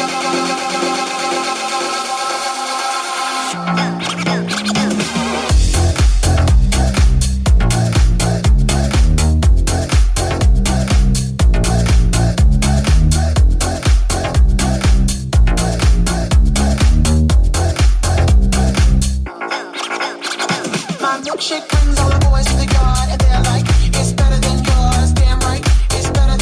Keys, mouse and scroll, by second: 1.7 right click, 2.3-3.7 ctrl+drag, 3.5 f, 3.7 middle click, 4.2-21.6 drag, 13.3 ctrl+z, 21.6 ctrl+shift+click, 22.5 middle click, 22.5 f, 23.0-26.4 drag.